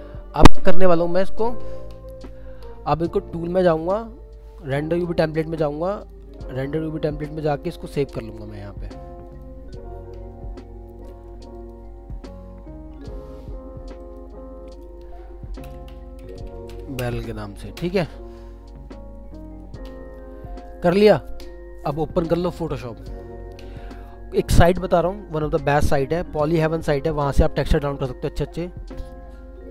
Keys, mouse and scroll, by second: 2.4 scroll up 1, 15.9-17.2 typing, 17.8 Return, 19.6 Return.